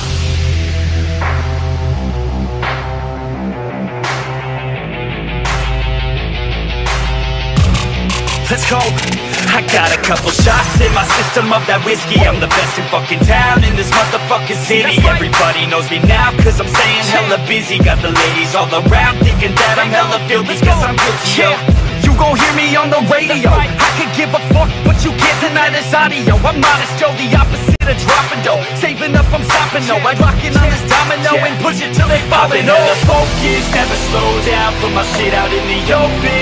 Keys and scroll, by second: 6.6 ctrl+t, 19.6 ctrl+e, 30.5 ctrl+d, 36.2 ctrl+e.